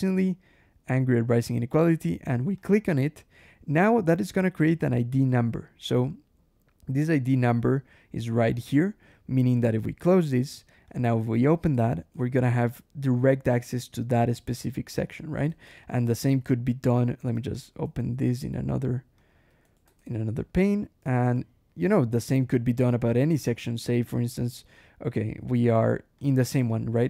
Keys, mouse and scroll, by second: 2.4 click, 4.2 click, 9.2 click, 9.8 ctrl+w, 10.7 click, 11.0 Escape, 11.6 alt+Return, 12.0 alt+Escape, 13.7 click, 14.4 Escape, 15.5 alt+h, 15.8 alt+Escape, 16.3 alt+l, 16.8 alt+h, 17.4 ctrl+alt+/, 18.1 click, 19.0 click, 19.5 alt+Return, 19.7 alt+Escape, 20.3 alt+click, 20.8 alt+shift+g, 21.2 shift+Escape, 22.2 scroll down 1, 23.1-23.6 scroll up 1, 23.7 scroll up 1, 24.3-25.1 scroll up 1, 25.3 scroll up 1, 26.1 click, 26.6 shift+click, 26.9 shift+v.